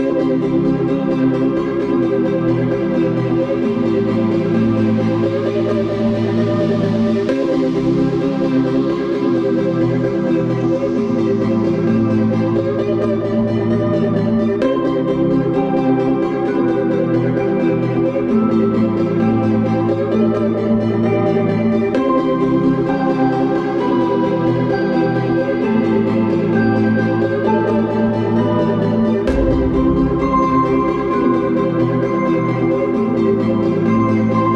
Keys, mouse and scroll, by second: 2.8 middle click, 4.7-5.4 scroll up 1, 5.4 middle click, 5.7 scroll up 1, 6.1-6.5 scroll down 1, 6.2-7.3 typing, 7.7 Return, 8.2 scroll down 1, 8.8 Escape, 9.4 click, 12.5-13.2 scroll up 1, 13.2 scroll up 1, 13.3 middle click, 14.0 scroll down 1, 14.2 Escape, 14.9 click, 15.1 d, 15.5 click, 16.1-17.6 typing, 18.9 Escape, 21.0-21.7 scroll up 1, 21.7 middle click, 26.6 Escape, 28.3 click, 33.7 middle click.